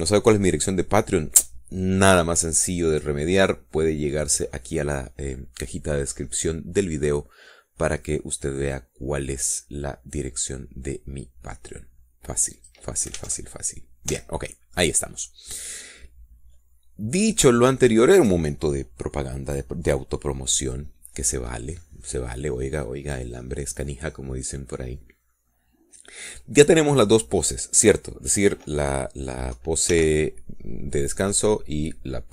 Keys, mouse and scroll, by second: 14.1 click, 14.7 alt+a, 15.6 Escape, 16.6 scroll down 2, 16.9-19.2 middle drag, 22.1 scroll down 2, 23.3-26.9 middle drag, 31.4 ctrl+l.